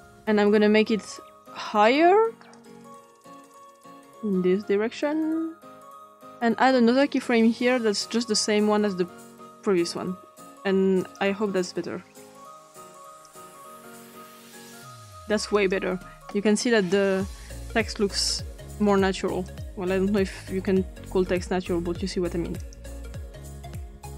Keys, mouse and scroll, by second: 2.5-6.2 drag, 7.0 click, 8.0 click, 11.0 click, 13.1 click, 15.5 click, 18.1 click, 19.4 click, 22.6 click.